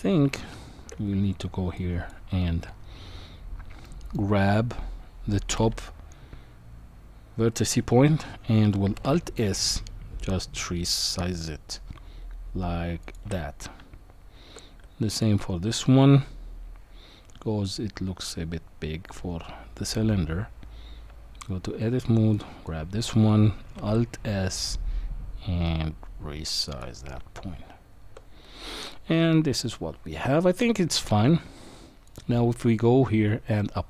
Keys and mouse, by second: 0.2 Tab, 1.9 click, 3.8 middle click, 9.1 alt+s, 13.0 alt+s, 13.3 alt+s, 13.8 Tab, 15.1 click, 21.1 Tab, 22.3 click, 23.7 alt+s, 27.2 Tab, 29.3-30.6 middle drag, 32.0 click.